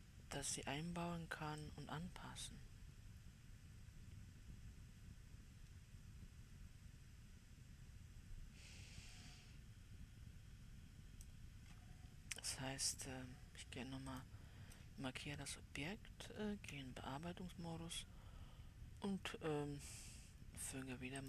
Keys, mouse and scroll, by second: 2.1-5.2 drag, 14.5-16.8 drag, 16.8 Tab.